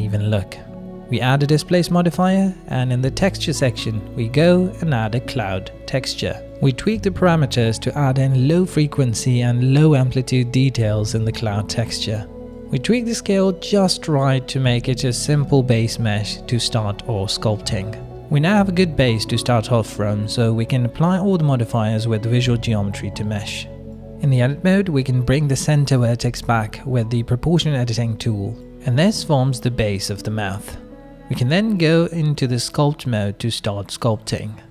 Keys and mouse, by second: 0.7 middle click, 3.4 click, 4.4-5.0 drag, 5.7 click, 7.0 middle click, 7.7-12.7 drag, 13.0-13.5 middle drag, 13.7 ctrl+middle drag, 14.5-17.6 shift+middle drag, 17.8-19.6 middle drag, 20.1 ctrl+a, 23.0 Tab, 24.1 click, 24.6 shift+middle click, 24.8-26.1 middle drag, 26.7 click, 28.1 g, 28.6 middle click, 30.9 click, 31.1-34.7 middle drag.